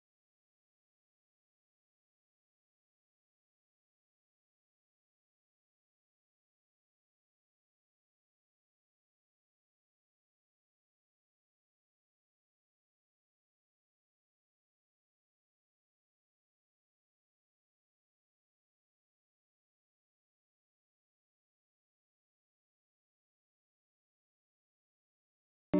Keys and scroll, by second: 12.4 ctrl+-.